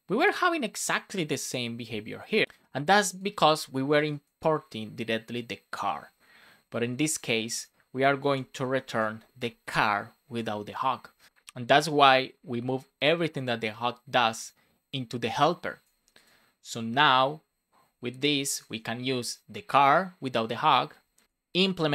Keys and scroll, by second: 8.2 Left, 8.5 shift+[, 8.9 space, 9.6 super+Right.